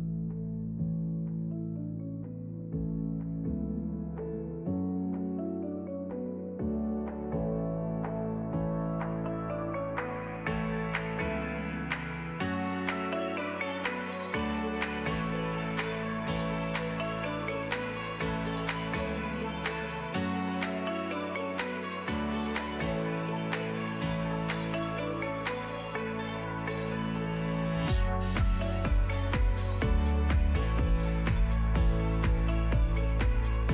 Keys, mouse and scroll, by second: 0.1 click, 0.4 middle click, 0.5-1.0 scroll down 4, 0.6 middle click, 1.2 shift+click, 1.4 ctrl+p, 1.7 click, 2.0 scroll down 2, 2.1-4.1 typing, 2.9 Tab, 3.3 click, 3.5 middle click, 4.6 click, 4.7 middle click, 4.8 ctrl+b, 5.4 Tab, 5.6 click, 5.7-13.1 typing, 7.3 alt+r, 8.5 scroll down 5, 10.5 click, 10.6 click, 11.4 click, 12.5 alt+d, 12.9 click, 13.2 alt+d, 14.6 r, 15.3 g, 16.0 click, 16.3 click, 16.4 click, 16.6 scroll up 3, 17.3 click, 17.6 r, 20.7 click, 21.0 click, 21.2 shift+], 21.4 alt+d, 21.7 click, 21.9 shift+s, 22.2 x, 22.3 shift+a, 22.6 ctrl+z, 23.1 shift+middle click, 23.8 click, 24.0 shift+click, 24.6 alt+p, 25.0 click, 25.2 middle click, 25.2 x, 25.4 shift+middle click, 25.6 ctrl+z, 25.9 alt+p, 26.1 click, 26.2 x, 26.5 shift+a, 27.5 Tab, 27.9 g, 28.2 Tab, 28.3 s, 29.1 KP_Decimal, 29.2 middle click, 29.4 scroll down 1, 29.5 middle click, 29.7 s, 30.1 middle click, 31.0 scroll down 2, 31.1 shift+click, 31.3 ctrl+l, 31.7 click, 32.0 scroll up 1, 32.2 click, 32.7 click, 32.8 click, 33.0 right click, 33.3 middle click.